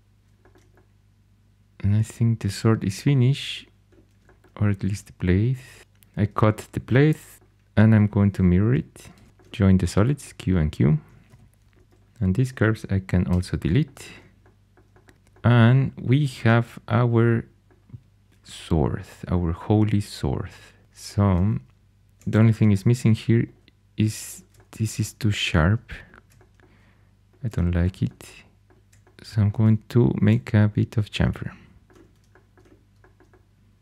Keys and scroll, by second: 4.7 shift+a, 5.8 c, 7.3 x, 8.2 4, 9.0 alt+x, 9.3-10.0 typing, 11.2 2, 11.8 alt+h, 13.2 x, 20.8 2, 22.4 shift+super+e, 31.8 shift+super+e.